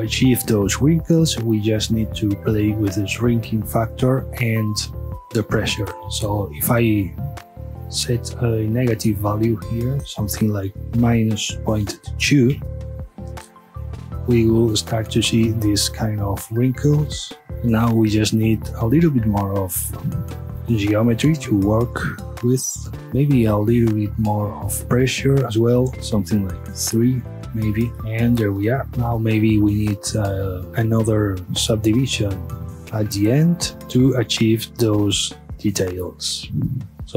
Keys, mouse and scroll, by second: 0.6-1.5 scroll up 1, 1.5 scroll down 1, 7.0 click, 19.7 click, 28.9 space, 29.1 click, 30.9 click, 31.5 click, 33.9 space, 34.1-36.6 middle drag, 36.6 scroll down 1, 36.9 scroll up 2, 37.0-37.1 middle drag.